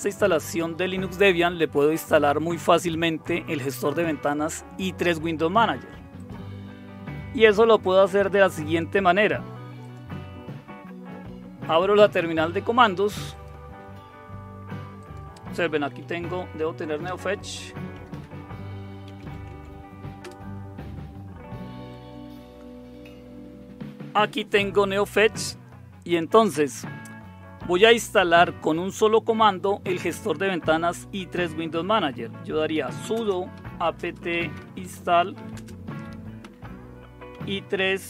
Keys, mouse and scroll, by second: 6.1 click, 7.8 click, 8.7 click, 9.8 click, 13.3 click, 15.0 click, 15.4-20.4 typing, 15.6 click, 20.2 Return, 32.3-38.0 typing.